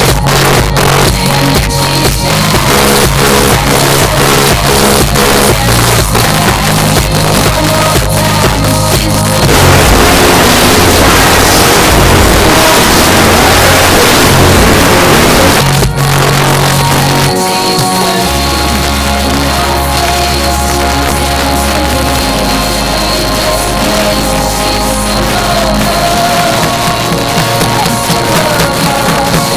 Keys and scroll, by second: 15.6 Page_Down.